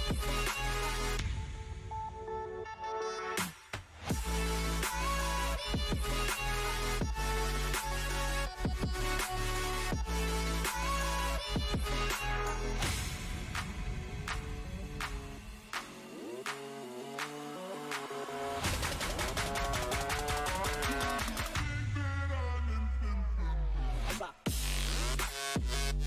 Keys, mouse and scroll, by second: 7.8-17.9 drag, 18.6 click, 20.8 click, 21.7 right click, 23.1 click.